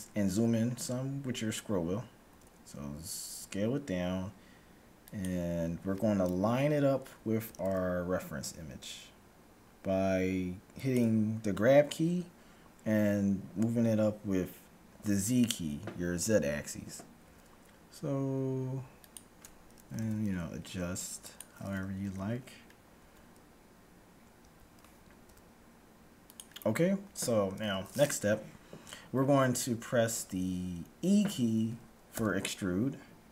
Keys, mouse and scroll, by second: 0.6-2.1 scroll down 1, 2.3 s, 7.6 g, 17.3 s, 20.0 g, 22.1 z, 23.0 a, 24.5 a, 25.3 s, 27.0-28.6 middle drag, 32.1 e.